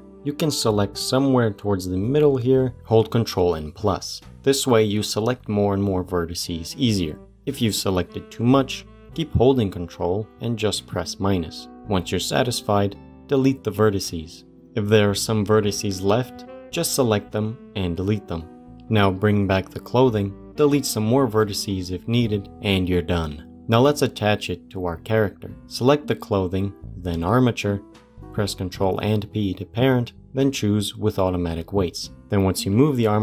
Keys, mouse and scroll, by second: 0.2-2.1 shift+middle drag, 2.1 click, 4.0 ctrl+KP_Add, 5.4 ctrl+KP_Add, 11.8 scroll down 2, 12.0-13.3 middle drag, 13.3 Delete, 13.9 middle click, 14.5 c, 18.0 middle click, 18.6 click, 20.4 c, 21.0-22.5 middle drag, 22.5 Delete, 22.7 Tab, 23.1 click, 23.4 g, 25.7 shift+click, 28.2 ctrl+p, 32.5 click.